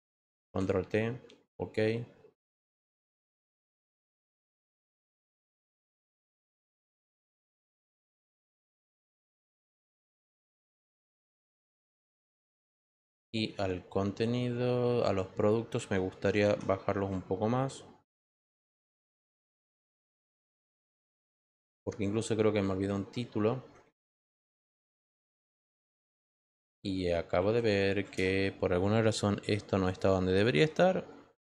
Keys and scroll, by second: 11.7 Return, 16.4 ctrl+t, 28.0 Return.